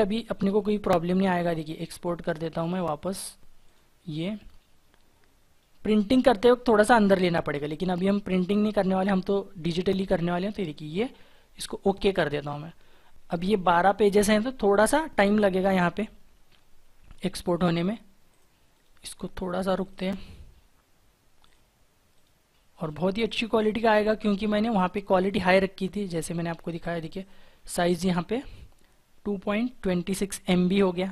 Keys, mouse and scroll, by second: 18.4 right click.